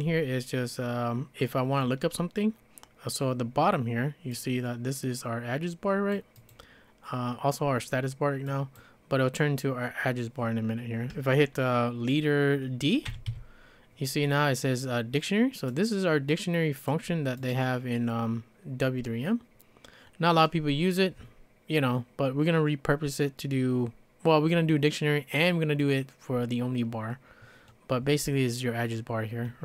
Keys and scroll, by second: 0.2 j, 12.8-13.8 typing.